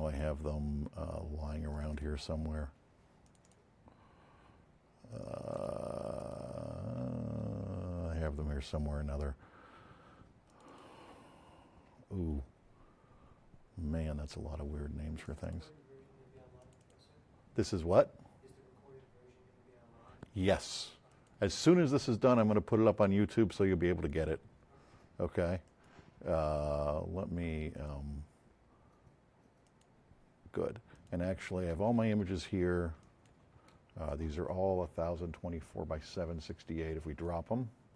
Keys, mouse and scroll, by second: 5.5 click, 6.1 click, 7.4 scroll up 2, 10.5 click, 11.6 F7, 15.2 click, 16.6 click, 16.7 click, 21.0 click, 25.7 right click, 27.7 click, 29.6 click, 30.9 click, 36.5 click.